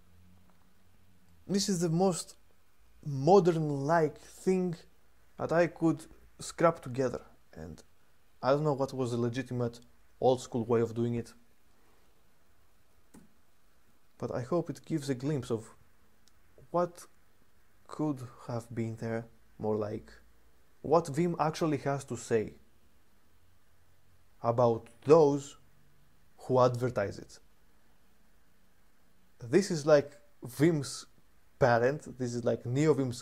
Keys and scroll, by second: 12.9 super+3.